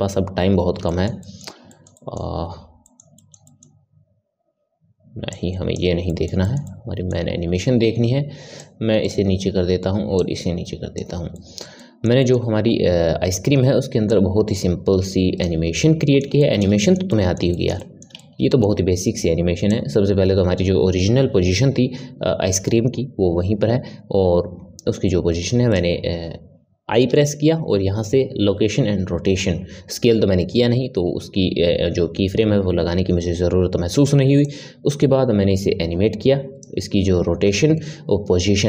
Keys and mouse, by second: 0.8-5.3 ctrl+middle drag, 5.3 click, 6.0-8.5 middle drag, 8.5-11.3 drag, 11.3-14.1 ctrl+middle drag, 14.1-15.7 drag, 15.7-19.7 middle drag, 19.7 click, 27.0 i, 34.4-37.4 drag.